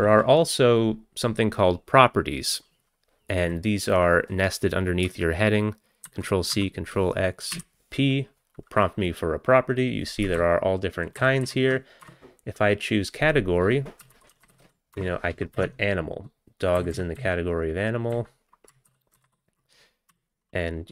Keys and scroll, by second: 0.0 Up, 6.1 ctrl+c, 6.5 ctrl+x, 7.6 p, 10.4 ctrl+n, 10.9 ctrl+n, 10.9 ctrl+n, 11.0 ctrl+n, 12.1 Return, 13.8-15.2 typing, 15.6 Down, 15.6 Tab, 16.8 Down, 16.9 Down, 17.7-18.9 Down, 19.2 ctrl+a.